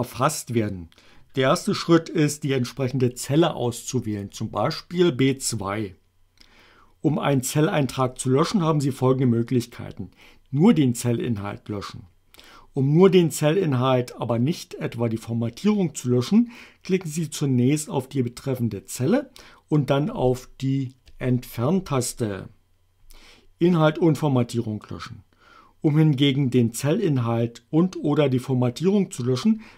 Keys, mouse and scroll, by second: 4.3 click, 20.9 Delete.